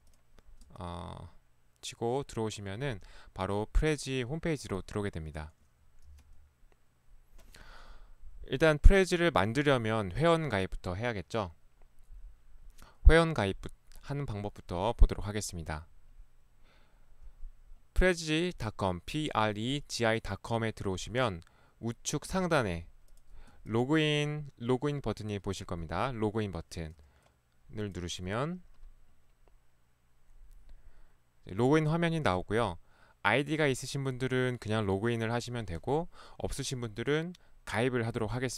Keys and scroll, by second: 6.2 e, 6.3 Escape, 6.3 ctrl+1, 22.3 ctrl+1, 23.5 ctrl+1, 26.8 ctrl+Escape, 27.0 ctrl+1.